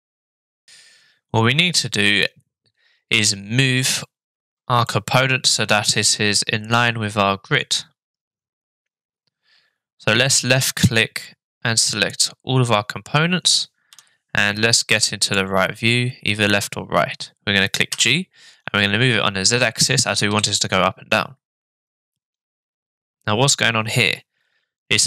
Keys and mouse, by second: 4.9-6.7 middle drag, 10.4-12.1 drag, 17.9 g.